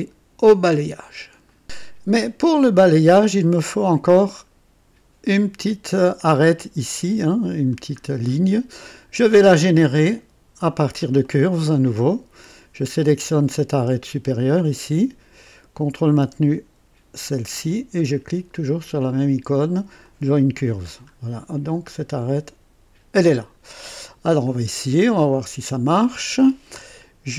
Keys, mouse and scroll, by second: 1.4 right click, 1.6 click, 8.0 scroll down 2, 11.3 click, 13.1 click, 13.8-14.3 scroll up 4, 14.4-15.1 right drag, 15.4-16.1 right drag, 17.1 ctrl+click, 20.0 click, 20.9-21.9 scroll down 6, 23.5-23.9 scroll down 2, 24.4-25.2 drag, 25.3-26.6 right drag.